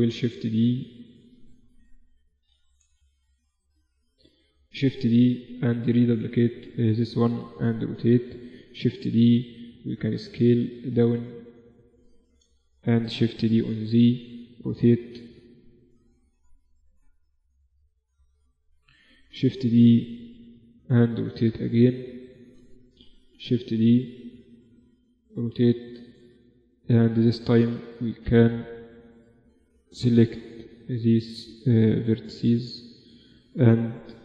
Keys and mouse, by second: 0.9 shift+f, 1.6 middle click, 4.7 shift+d, 7.1 r, 8.5 shift+d, 10.3 s, 12.0-14.6 middle drag, 13.0 shift+d, 14.6 r, 15.9 click, 17.8 click, 18.7 middle click, 18.9 shift+d, 20.5 r, 21.7-23.3 drag, 22.8 shift+d, 24.6 r, 25.7 Tab, 26.8 z, 27.5 z, 27.7 a, 28.5 b, 29.7 g, 32.2 a, 32.3 a, 32.8 a, 33.2 b.